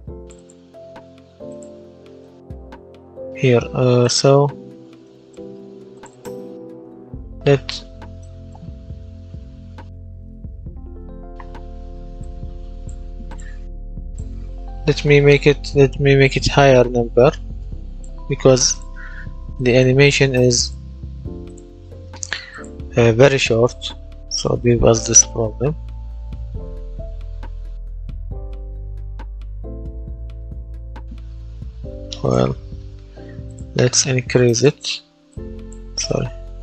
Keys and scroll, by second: 16.5 KP_0, 16.7 KP_Decimal, 17.0 KP_2, 17.1 KP_5, 17.5 Return, 23.2 w, 24.1 space, 26.1 space, 28.1 space, 30.5 Escape, 36.4 shift+,.